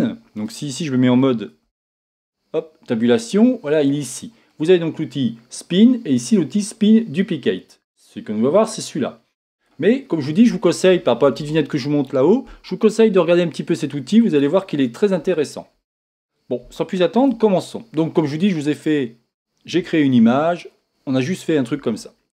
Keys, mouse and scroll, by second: 2.1 Tab, 9.8-20.2 drag, 18.3 scroll up 1, 19.0 scroll up 1, 19.0-20.1 scroll down 1, 20.2-22.3 shift+middle drag, 21.7 shift+scroll up 1.